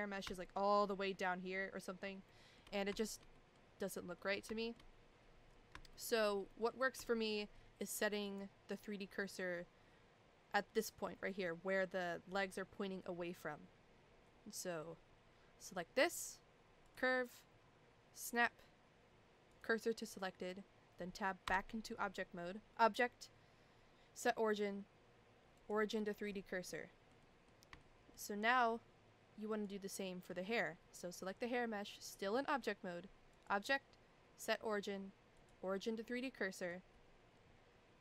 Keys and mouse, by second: 0.3 shift+middle click, 2.3 shift+middle click, 3.0 shift+middle click, 3.3 middle click, 4.2 middle click, 4.6 shift+middle click, 5.9 shift+middle click, 6.5 middle click, 7.1 shift+middle click, 8.2 click, 16.9-19.6 drag, 21.5 Tab, 22.7-25.7 drag, 26.7-27.1 middle drag, 27.2 middle drag, 27.8-28.2 shift+middle drag, 29.6 click, 30.0 middle drag, 33.3-35.5 drag, 36.3-36.7 middle drag.